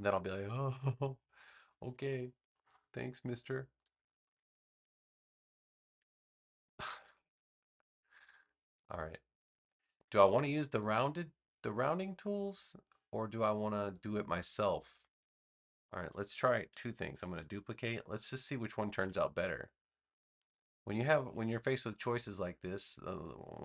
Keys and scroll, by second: 17.7 super+j, 18.9 v.